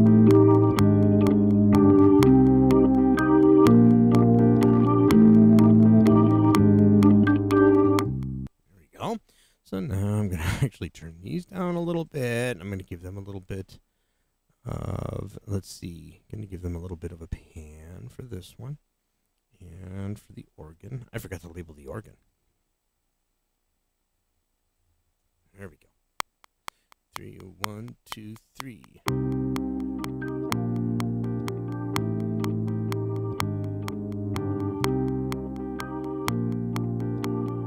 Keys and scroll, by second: 8.4 space, 23.5-26.1 typing.